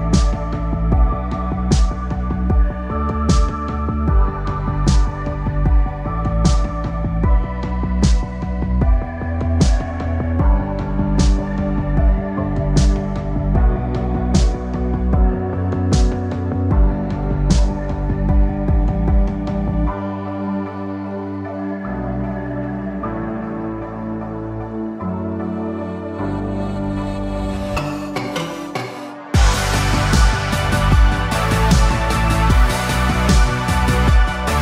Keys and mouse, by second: 0.3 c, 2.4 KP_3, 3.7 KP_3, 5.1 c, 7.4 Delete, 11.8 c, 15.0 KP_3, 16.6 c, 19.4 g, 23.0 e, 26.6 a, 26.8 a, 31.1 click, 33.8-34.6 middle drag.